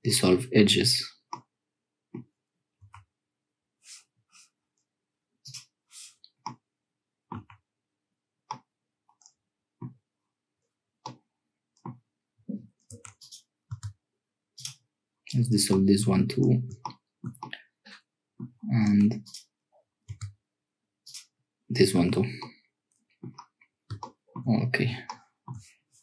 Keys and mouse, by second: 1.3 click, 2.9 Tab, 6.4-7.8 drag, 7.4 Tab, 8.5-9.9 drag, 11.0 click, 12.9 1, 13.1 click, 13.7 x, 15.7 middle click, 16.8 shift+middle click, 17.4-18.5 middle drag, 18.7 -, 18.9 1, 19.2 click, 20.0 x, 22.0 Tab, 22.4 click, 25.2 shift+middle click.